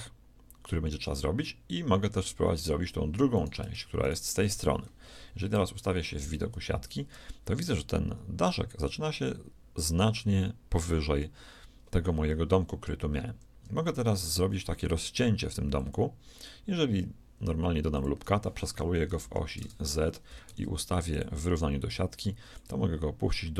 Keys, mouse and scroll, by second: 3.3-5.4 right drag, 5.0 shift+KP_1, 5.4 middle click, 5.6 right click, 5.6 KP_3, 6.6 z, 13.4 ctrl+r, 18.7 s, 20.4 shift+s, 22.5-23.5 drag.